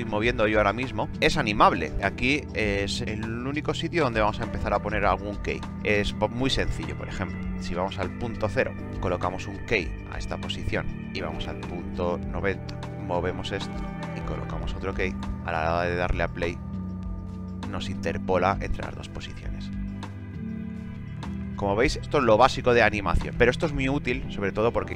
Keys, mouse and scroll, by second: 6.7-9.4 drag, 10.9-12.6 drag.